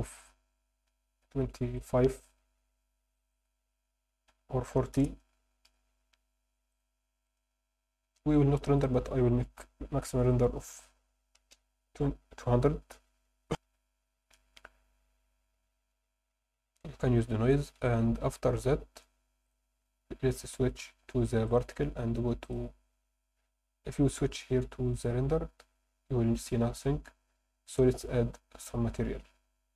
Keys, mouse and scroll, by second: 6.7 click, 7.3 click, 7.7-8.3 scroll down 2, 8.8-11.5 drag, 13.4 F9, 13.5 F10, 19.4 click, 21.5 click, 22.4-24.0 drag, 25.2 drag, 27.7-29.7 drag.